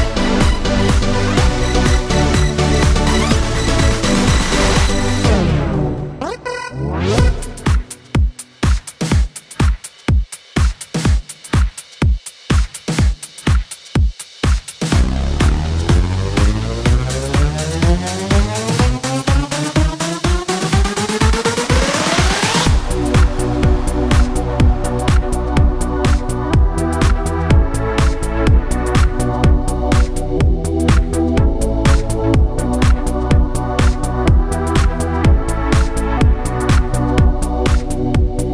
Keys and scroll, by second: 0.1-2.3 typing, 3.3 Return, 12.7 Tab, 20.4 Tab, 23.1-25.4 typing, 27.4 Return, 32.4 Tab.